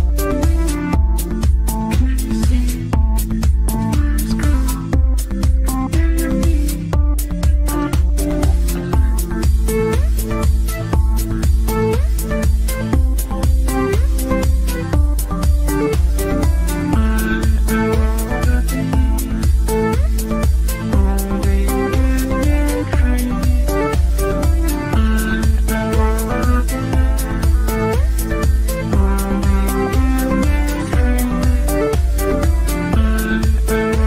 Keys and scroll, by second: 13.5 ctrl+q.